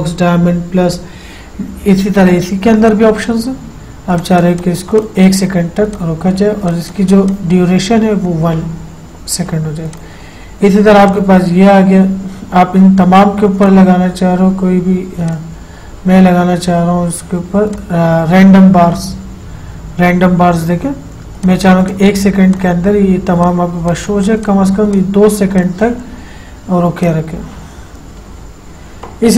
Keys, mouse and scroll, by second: 3.1 click, 10.2 click, 13.9 click, 18.0 click, 21.7 click.